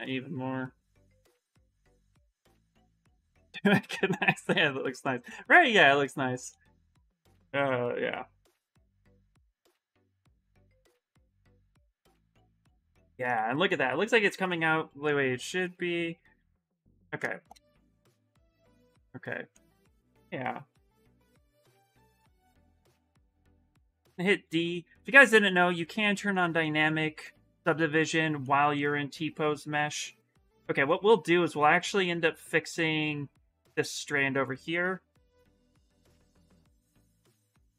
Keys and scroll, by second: 13.1 q, 16.3 s, 19.8 s, 23.8 d, 31.1 s, 31.8 s, 36.7 shift+d, 37.6 s.